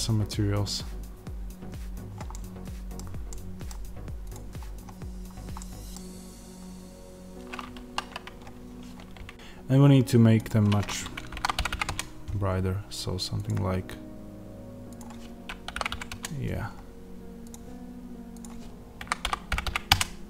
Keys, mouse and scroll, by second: 4.2 click, 4.5 scroll up 1, 5.5-9.3 middle drag, 5.9-9.3 scroll down 1, 9.3 click, 11.8-13.4 drag, 11.8 KP_0, 11.9 KP_Enter, 16.0-17.4 drag, 16.0 KP_0, 16.1 KP_Enter, 19.8-20.2 drag.